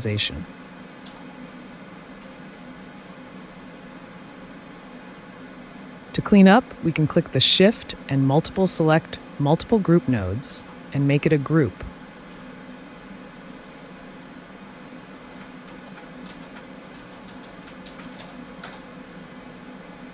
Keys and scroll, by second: 1.1 r, 10.5 ctrl+shift+g, 14.6 F2, 16.1-18.7 typing.